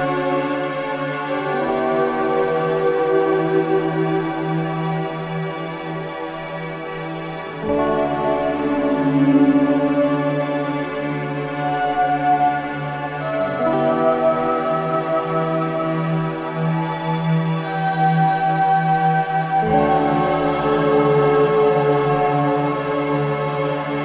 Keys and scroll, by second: 6.3 ctrl+space, 10.4-11.4 typing, 13.7 ctrl+k, 22.2 shift+F2, 22.5 F3.